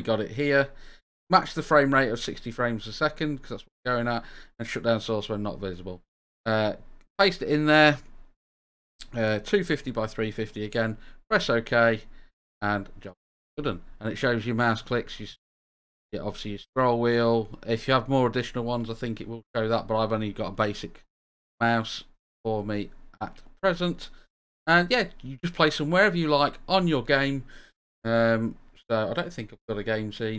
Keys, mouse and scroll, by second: 0.1 click, 1.6 scroll down 2, 2.8 scroll down 1, 5.1 scroll up 2, 11.0 drag, 13.5 click, 14.1-14.6 right drag, 15.4-15.8 drag, 16.0-16.6 scroll up 2, 16.6-17.2 scroll down 2, 19.0-19.4 middle drag, 19.7 click, 20.7-22.7 drag, 23.2 click, 23.8-26.5 drag, 30.1-30.3 drag.